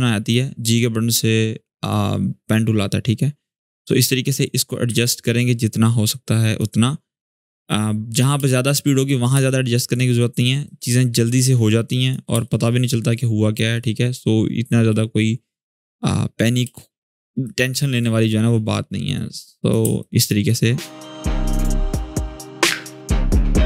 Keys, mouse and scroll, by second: 4.6 v, 4.9-6.5 drag, 8.1 space, 8.5-8.8 click, 8.6 space, 9.2 click, 9.6 space, 10.4-11.9 drag, 12.0 space, 12.2-12.8 click, 12.6 space, 14.9-16.5 drag, 16.4 space, 16.5-17.1 click, 16.9 space, 17.2 click, 17.2 space, 18.9-19.5 click, 19.6 space, 19.7 click, 20.1-20.8 space, 21.0 click, 21.0 space, 21.4-22.5 click, 22.5 space, 22.5-22.9 click, 22.9 space, 23.4-23.6 click.